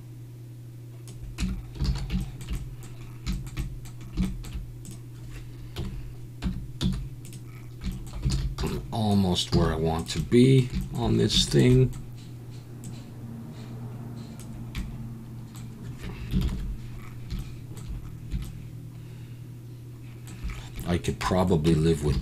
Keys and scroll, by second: 1.4 Tab, 1.8 alt+a, 5.8 KP_7, 6.4 Tab, 6.8 z, 8.3 alt+a, 8.6 b, 9.5 z, 16.4 ctrl+KP_7, 21.7 Tab, 22.1 alt+a.